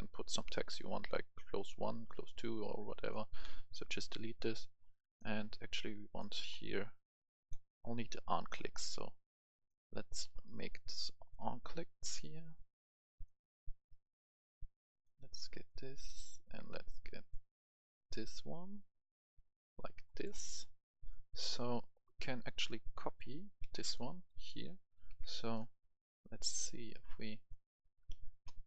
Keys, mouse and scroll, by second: 1.0-1.7 scroll down 1, 3.3 Delete, 4.3 scroll up 1, 4.8-5.2 scroll down 2, 5.2 right click, 6.1 click, 6.5-7.1 scroll down 1, 7.4 click, 10.2 scroll down 1, 11.2 click, 14.0-14.4 scroll down 1, 15.0 click, 17.1 click, 18.0-18.4 scroll down 2, 18.0 click, 19.0 click, 20.0 right click, 20.4 scroll down 1, 20.7 right click, 22.4 scroll up 1, 22.4 right click, 22.8 click, 23.6 ctrl+c, 23.7 right click, 24.1 right click, 24.8 click, 25.3 right click, 27.6 scroll up 1.